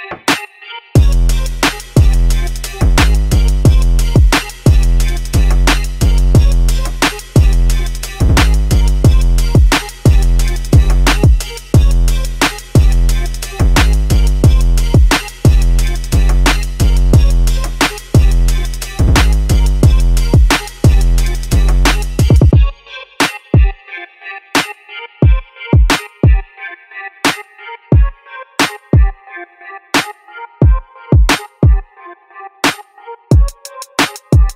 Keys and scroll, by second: 4.2-5.0 typing, 6.6-7.7 typing, 8.5 Return, 9.8-11.0 typing, 31.3-32.6 typing.